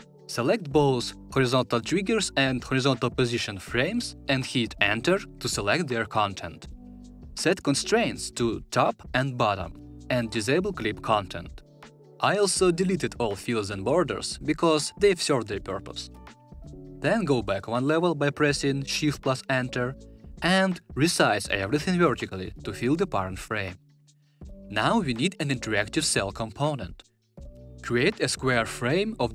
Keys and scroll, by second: 4.0 Return, 17.9 shift+Return.